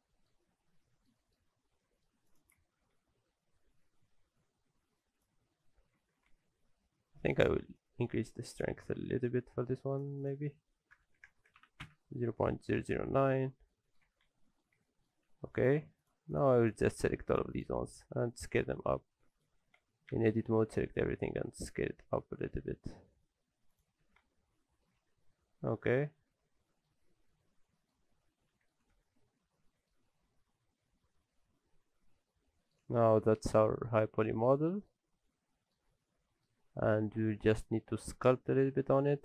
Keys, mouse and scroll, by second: 0.4-1.1 scroll up 3, 0.8 middle click, 1.2 shift+middle click, 1.4-2.3 scroll up 3, 1.8 middle click, 2.3 click, 2.6 Tab, 3.1 a, 3.6 s, 6.0 alt+a, 6.3 Tab, 7.8 shift+click, 10.2 click, 11.4 KP_0, 12.7-13.2 scroll down 3, 13.3 shift+middle click, 13.6-13.9 scroll down 2, 13.7 middle click, 14.1 alt+a, 14.2-14.8 scroll up 5, 14.6 middle click, 14.8 shift+middle click, 15.3 scroll up 1, 15.6 click, 16.0 shift+click, 16.9 shift+middle click, 17.3 shift+click, 17.5 shift+click, 18.1 s, 19.8 Tab, 20.1 a, 20.3 scroll up 1, 20.8-21.1 scroll down 1, 21.1 s, 24.0 alt+a, 24.2 Tab, 24.3 scroll down 2, 24.6 middle click, 24.9 alt+a, 25.3 middle click, 27.1 scroll down 2, 27.3 middle click, 28.1-28.8 scroll down 4, 28.5 middle click, 28.9 ctrl+space, 29.5 shift+middle click, 30.1 middle click, 32.9 shift+middle click, 33.4 middle click, 34.1-34.5 scroll up 3, 34.7 shift+middle click, 35.0-35.5 scroll up 3, 35.3 middle click, 35.8 scroll up 1, 36.0 shift+middle click, 36.6-36.9 scroll down 5, 36.9 shift+middle click, 37.3-37.8 scroll up 2, 38.3 scroll down 1, 39.1 middle click, 39.1-39.2 scroll down 1.